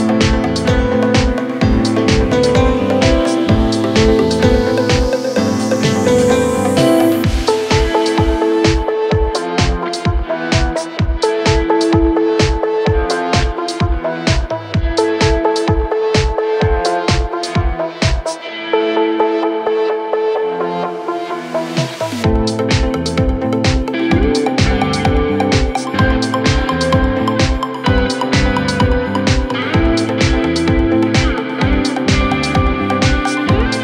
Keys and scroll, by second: 0.7 4, 14.3 ], 16.1 4, 21.6 F1, 24.1 1, 24.3 Return.